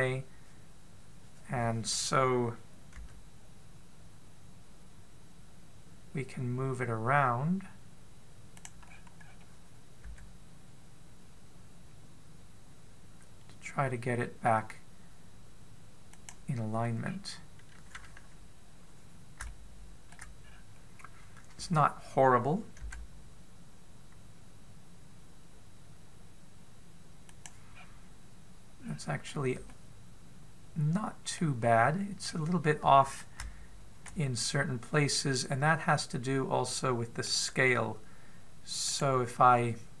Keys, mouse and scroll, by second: 0.3-3.8 scroll down 5, 3.8 scroll down 1, 3.8 g, 9.7-10.9 scroll up 7, 10.9 g, 17.9-20.2 scroll down 2, 20.2 shift+middle click, 20.2-21.1 scroll down 2, 21.2 scroll up 2, 23.7 g, 28.6-29.5 scroll down 2, 29.5 scroll down 2, 29.6-30.4 scroll up 3, 30.5 middle click, 32.4-33.0 scroll down 3, 33.0-33.6 scroll up 2, 34.2 shift+middle click, 35.2-35.8 scroll up 2, 35.9 middle click, 39.7 right click.